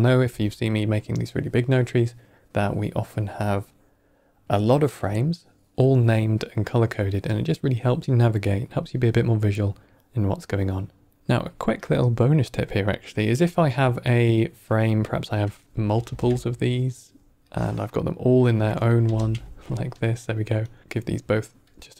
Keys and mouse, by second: 9.5 middle click, 11.7 click, 12.7 click, 13.3 click, 14.6 click, 15.6 middle click, 15.6 click, 15.9 ctrl+shift+d, 17.4-18.2 drag, 18.9 ctrl+j, 19.8 click, 20.5 click, 20.8 click, 20.8 n, 21.6 click.